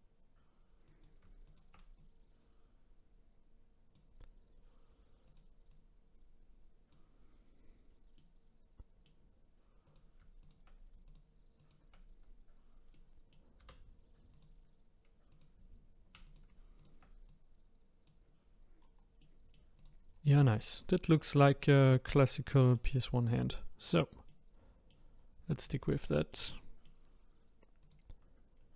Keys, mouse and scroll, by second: 0.8 click, 1.4 shift+click, 1.9 click, 5.2 click, 5.7 click, 7.3-8.1 scroll down 2, 8.1-9.8 middle drag, 9.8 click, 10.4 shift+click, 11.0 shift+click, 11.6 shift+click, 12.9 middle click, 13.6 r, 15.3 click, 16.2 click, 16.8 shift+click, 18.8 scroll down 2, 19.2 middle click, 19.8 click, 20.1-20.5 scroll down 2, 20.5-23.3 middle drag, 23.3-23.9 scroll up 5, 23.9 scroll down 3, 24.2 middle click, 25.2-25.6 scroll down 2, 25.6 click, 26.0-27.8 middle drag, 27.8 click, 28.5-28.7 scroll up 5.